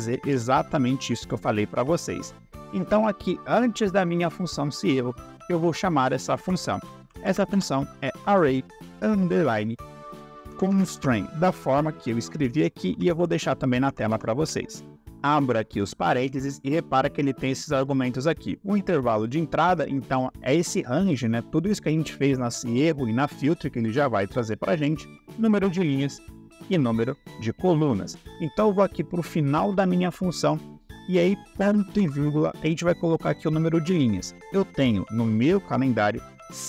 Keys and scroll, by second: 0.1 F2, 5.5 Caps_Lock, 6.6-7.9 typing, 9.7-14.0 typing, 15.1 shift+9, 31.9 /.